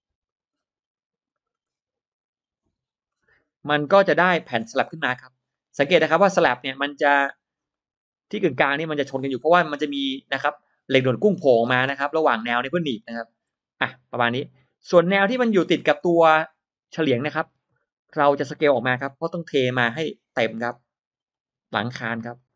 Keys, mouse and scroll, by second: 0.1 drag, 0.4-0.7 scroll down 1, 1.1-1.8 scroll up 2, 1.2 middle click, 1.9 click, 2.7 click, 3.0 scroll down 1, 3.5-3.8 scroll up 1, 4.1 drag, 4.4-4.9 scroll up 1, 4.9 scroll down 1, 5.4 middle click, 5.5-5.9 scroll down 1, 5.9-6.2 scroll up 1, 6.3 middle click, 6.7 scroll down 1, 6.8 middle click, 7.6 middle click, 8.2-8.5 scroll down 1, 8.5-9.1 scroll up 4, 11.7-12.0 scroll down 2, 13.0-13.3 scroll down 2, 13.4-14.7 middle drag, 14.7-16.1 scroll down 3, 14.8 middle click, 15.2 middle click, 15.6 middle click, 16.3 scroll up 1, 17.0-17.6 scroll up 1, 17.5 space, 17.7 drag, 18.0 scroll down 1, 18.8 scroll up 1, 19.5 s, 20.5-21.5 drag, 22.3 click.